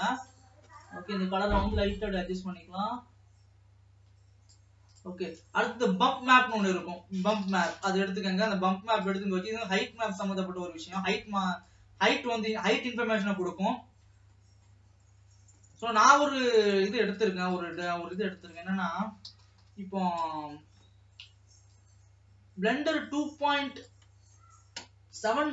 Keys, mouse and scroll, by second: 1.8 click, 5.3 click, 5.5-6.0 scroll down 2, 6.0 middle click, 6.4 shift+a, 10.0 middle click, 10.5-13.3 drag, 13.6-15.2 middle drag, 15.2 scroll down 2, 21.7-25.5 drag.